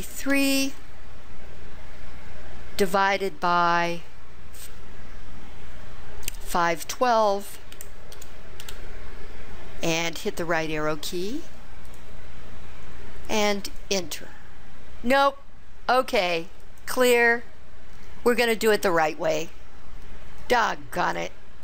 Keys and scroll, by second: 0.4 3, 7.6-9.3 typing, 12.0 ), 13.9 Return.